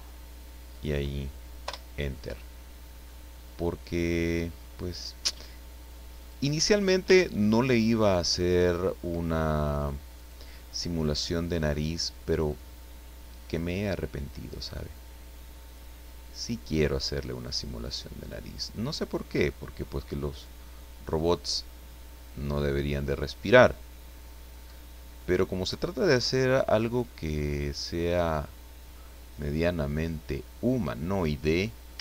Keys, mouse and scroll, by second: 0.7 click, 1.6 Return, 2.4 scroll down 2, 2.6 middle click, 6.2 click, 6.7 scroll up 2, 7.1 shift+middle click, 10.1 right click, 10.7-11.7 middle drag, 12.4-14.7 drag, 15.6 click, 16.9 right click, 17.8-19.9 drag, 20.3 right click, 21.5-25.8 drag, 24.6-25.8 right drag, 26.8 right click, 27.6-32.0 drag.